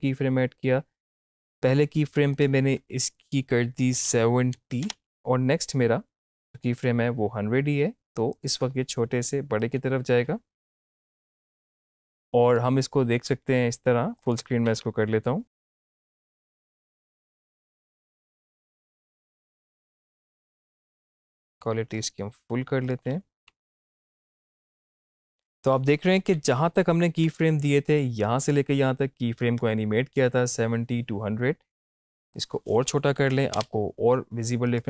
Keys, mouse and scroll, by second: 6.5 click, 10.8 Up, 14.2 click, 15.6 space, 21.2 click, 23.1 space, 25.8 space, 26.2 Up, 32.3 click, 34.7 click.